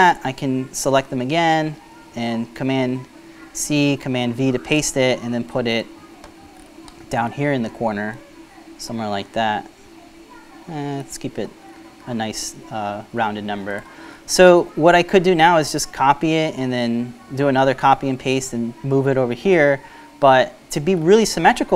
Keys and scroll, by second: 1.6 shift+super+c.